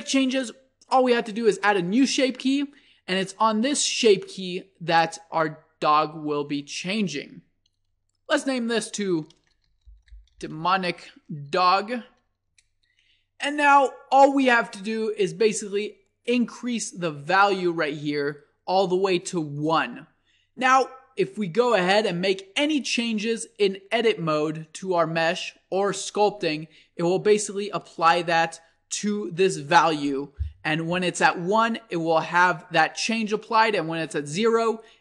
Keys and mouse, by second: 1.9-3.6 drag, 4.0-6.2 drag, 16.9-18.8 drag, 23.8 Tab, 25.6 Tab, 33.5-35.0 drag.